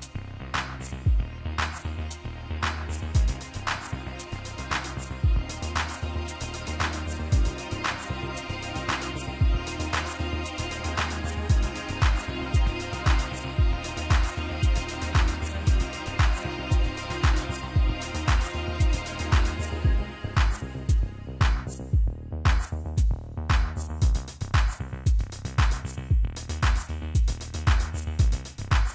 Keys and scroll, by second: 19.0-19.4 typing, 21.6-22.0 typing, 22.5 Return, 27.0 ctrl+x, 27.8 ctrl+b.